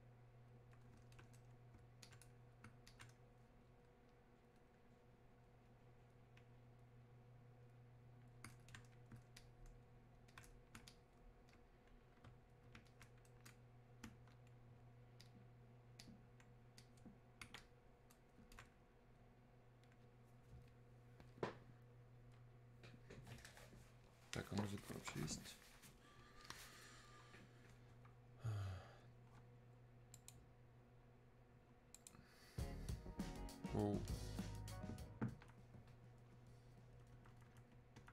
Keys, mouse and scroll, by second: 30.1 click.